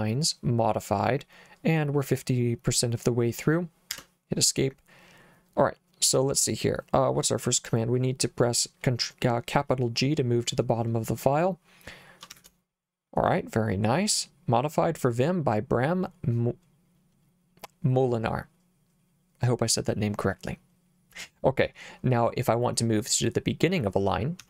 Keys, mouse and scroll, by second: 3.9 Escape, 12.3 shift+g, 24.4 g.